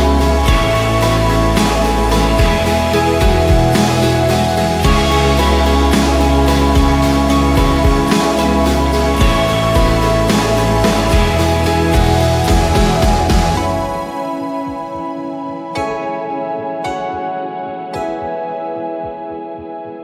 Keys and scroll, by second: 0.0-0.1 typing, 2.3-3.1 typing, 4.3 typing, 4.8 Return, 7.1 ctrl+g, 7.9-10.2 typing, 16.2 v, 17.5 ctrl+d, 19.0 ctrl+g, 19.9-20.0 typing.